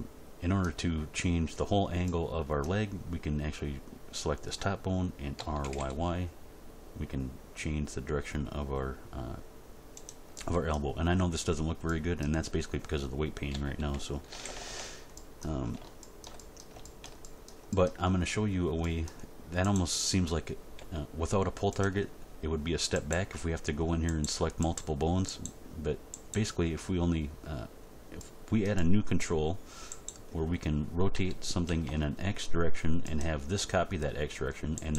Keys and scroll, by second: 5.4 r, 5.6 y, 13.5 a, 14.3 alt+r, 14.4 alt+g, 14.7 alt+s, 20.7 g, 31.1 r, 31.7 x.